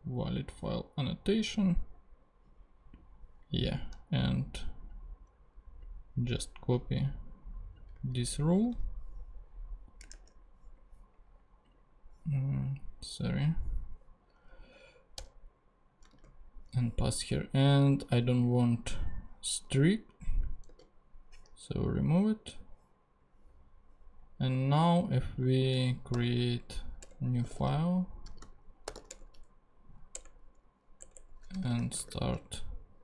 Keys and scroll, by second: 8.1 super+c, 8.7 super+Tab, 10.1 ctrl+Tab, 15.2 Return, 16.0 super+Return, 16.1 super+v, 20.7 super+x, 26.1 super+n, 27.0 super+Return, 27.1-29.4 typing, 31.3-33.0 typing.